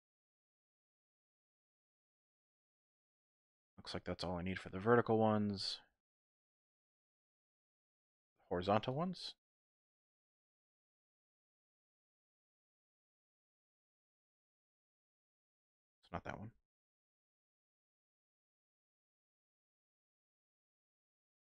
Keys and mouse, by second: 0.3-1.4 drag, 2.0 click, 2.7-5.0 shift+drag, 5.3 click, 6.0 shift+click, 7.0 click, 7.1 middle click, 8.4 ctrl+r, 10.0 click, 10.3 ctrl+r, 12.2 click, 12.6 ctrl+r, 14.5 click, 14.9 ctrl+r, 15.8 click, 16.5 ctrl+z, 17.5 ctrl+r, 20.6 click, 21.2 shift+middle click.